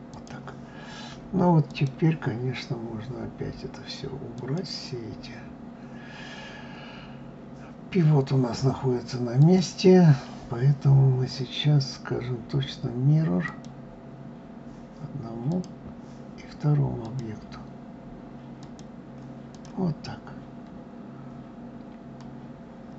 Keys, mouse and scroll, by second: 1.3-5.1 drag, 9.0-12.0 drag, 15.1 click, 16.6-19.2 drag, 19.6-22.6 middle drag.